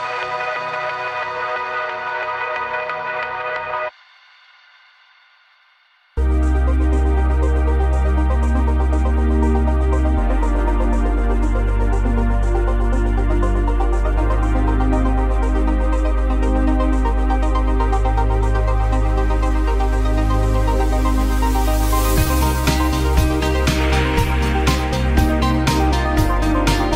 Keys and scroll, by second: 8.7 v.